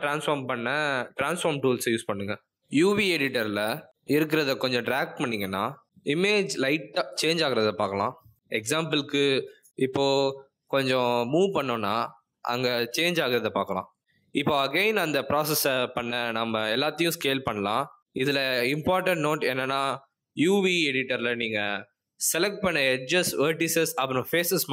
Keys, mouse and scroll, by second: 0.4 click, 1.4 click, 4.7 click, 6.2 click, 7.6 click, 9.3 click, 10.3 click, 16.0 click, 17.6 ctrl+z, 18.0 ctrl+z, 18.5 a, 19.2 s, 22.4 click.